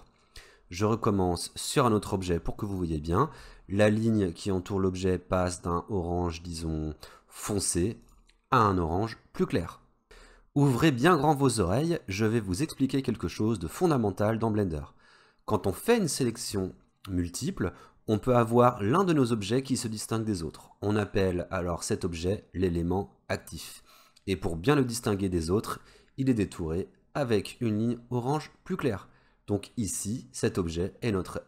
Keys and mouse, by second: 8.1 shift+click.